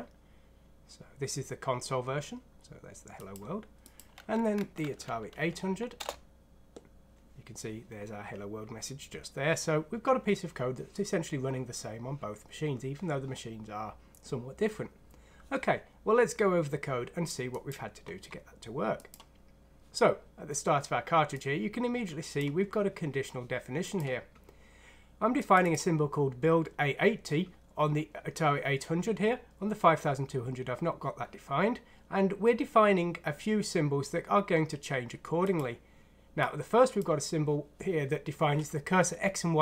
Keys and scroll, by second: 4.8 F6, 5.3 Down, 5.6 typing, 6.0 Return.